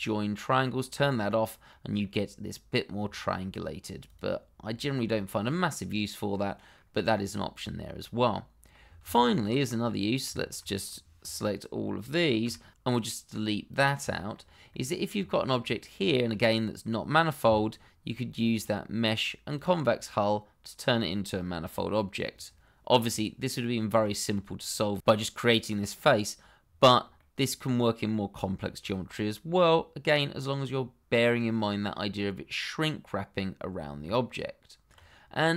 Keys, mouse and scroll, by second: 1.7 middle click, 4.0 click, 4.6 middle click, 5.1 middle click, 9.0 ctrl+z, 9.6 middle click, 11.2 click, 12.7 Delete, 13.7 click, 14.1 shift+middle click, 14.2 middle click, 14.4-14.7 scroll up 1, 14.7 middle click, 15.4 shift+middle click, 15.5-16.1 scroll up 1, 16.1 shift+middle click, 17.4 a, 18.5 click, 20.1 middle click, 27.1 middle click, 28.3 scroll down 1, 28.8 middle click, 34.0 Tab, 35.3 middle click.